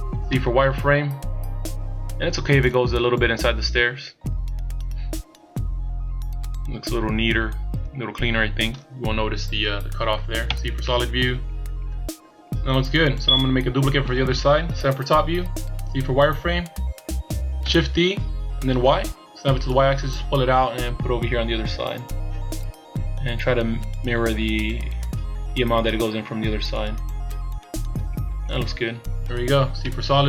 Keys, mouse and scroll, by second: 0.3 z, 0.7-1.7 scroll up 2, 2.7 click, 9.3-10.5 scroll down 1, 10.5 z, 10.8 middle click, 14.8 KP_7, 15.8 z, 17.8 shift+d, 29.8 z.